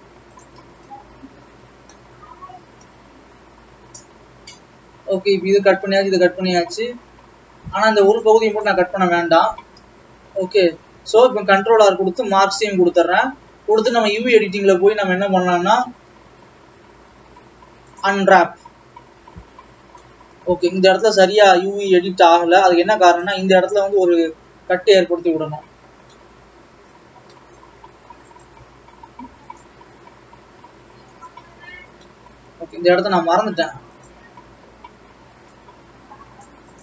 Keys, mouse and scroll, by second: 0.6 shift+click, 2.3 middle click, 3.1-4.5 scroll down 1, 4.5-5.3 scroll down 1, 5.3-8.7 scroll up 1, 8.7 shift+click, 11.0 ctrl+e, 14.8 click, 15.9-16.3 scroll up 4, 16.3 a, 16.8-17.2 scroll up 1, 18.6 u, 23.5 click, 25.5-26.1 scroll up 7, 26.1-27.5 middle drag, 27.5-27.8 scroll up 3, 27.8 middle click, 28.6 click, 31.3 click, 32.1-34.3 middle drag, 34.3 ctrl+e, 34.5 a.